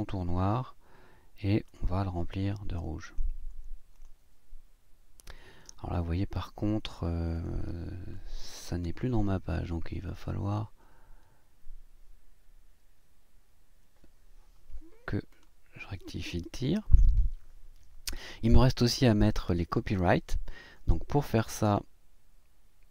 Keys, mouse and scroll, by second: 1.7 click, 3.0 click, 3.9 click, 7.3 click, 9.3 Up, 12.4 Left, 15.3 click.